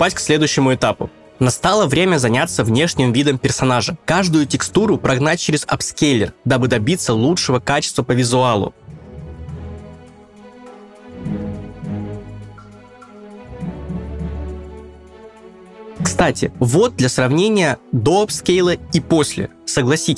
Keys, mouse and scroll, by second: 0.2 s, 1.9 click, 2.1 middle click, 2.1 click, 2.8 click, 4.2 scroll down 2, 4.4 click, 4.6 shift+middle click, 4.6 scroll down 1, 5.0 click, 5.3 click, 5.3 middle click, 5.3 scroll down 1, 5.5 middle click, 5.7 ctrl+right click, 5.7 scroll up 1, 6.9 middle click, 6.9 click, 6.9 scroll down 2, 7.1 scroll up 8, 7.8 click, 7.8 scroll down 4, 8.0 ctrl+right click, 8.0 middle click, 8.2 middle click, 8.2 click, 8.4 middle click, 8.4 click, 8.6 click, 8.8 click, 8.8 middle click, 9.2 middle click, 9.2 scroll up 4, 9.4 click, 9.4 middle click, 9.4 scroll down 2, 9.6 click.